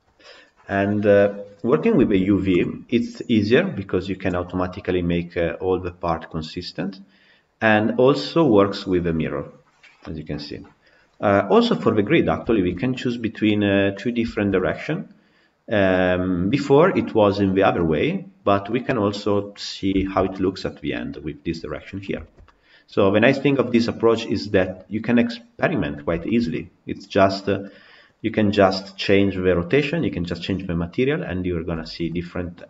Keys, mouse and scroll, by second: 4.3-17.5 middle drag, 17.5 scroll down 1, 17.6-19.6 middle drag, 19.6 scroll up 2, 19.9-24.3 shift+middle drag, 24.3 scroll down 1, 24.5-25.7 middle drag, 25.7-26.1 scroll up 2, 26.1-26.9 shift+middle drag, 26.9-27.5 scroll down 5, 27.5-28.4 middle drag, 28.4-29.7 scroll down 3, 29.7 scroll up 4, 30.8 scroll up 2, 31.6-32.6 shift+middle drag.